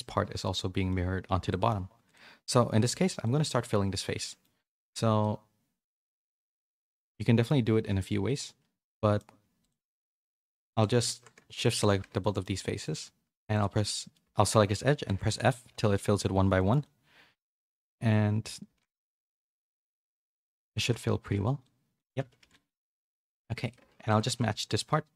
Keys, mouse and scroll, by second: 1.4 middle click, 3.2 middle click, 3.5 Tab, 3.9 middle click, 4.9 2, 5.2-6.3 middle drag, 6.9 middle click, 7.7 2, 8.0-9.1 middle drag, 9.5 click, 10.7 click, 11.6 shift+click, 12.0 f, 12.2 middle click, 12.5 2, 12.8 click, 13.8 middle click, 14.3 shift+middle click, 15.2 f, 16.1 f, 16.5 shift+middle click, 16.8-17.8 middle drag, 18.0-24.2 typing, 19.8 middle click, 21.6 middle click, 22.2 Tab, 22.5 middle click, 23.0 middle click, 23.8 Tab.